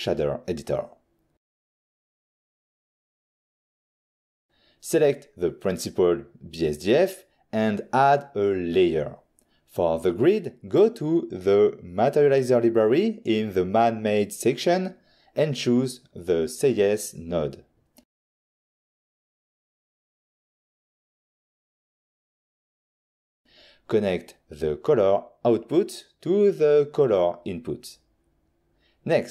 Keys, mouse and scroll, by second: 0.2 click, 1.0 click, 1.9 middle click, 3.0 middle click, 4.1 click, 4.9 click, 5.3 click, 7.9 f, 9.1 click, 10.5 scroll up 1, 11.1 middle click, 11.4 middle click, 12.3 click, 13.3 n, 15.0 click, 16.3 click, 17.4 click, 17.6 click, 18.6 click, 21.2 click, 22.8 click, 27.3 click, 28.3 middle click, 28.6 middle click, 29.0 click.